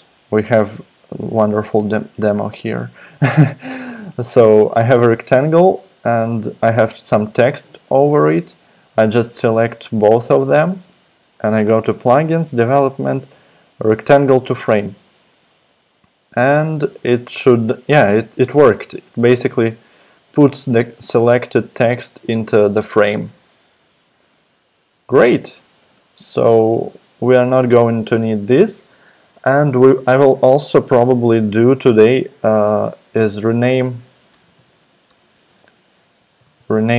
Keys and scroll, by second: 23.9 super+z, 33.5-36.9 typing.